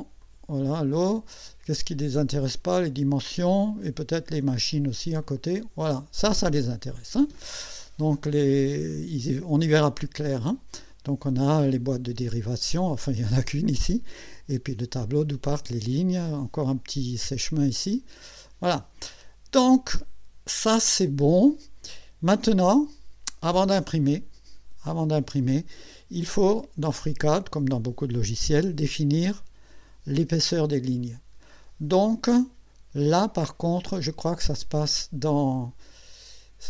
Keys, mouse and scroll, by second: 0.2 click, 3.2 click, 5.2 click, 11.8 scroll up 2.